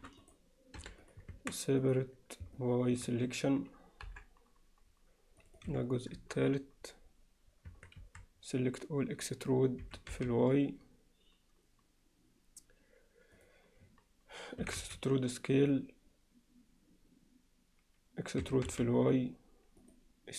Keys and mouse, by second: 0.8 p, 1.3 Tab, 1.8 click, 2.6-3.0 alt+middle drag, 4.1 KP_7, 5.4-6.4 drag, 7.7 Tab, 8.0 a, 9.8 e, 14.6 e, 18.4 e.